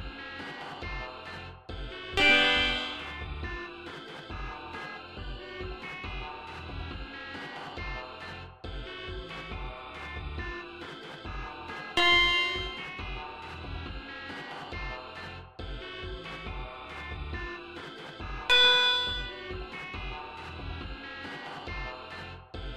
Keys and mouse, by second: 0.2 click, 1.5 e, 2.0 click, 3.2 Delete, 6.4 d, 7.9 click, 9.3 click, 10.6-12.1 drag, 15.7 click, 17.1 click, 18.3 click, 21.2 click, 21.9 click.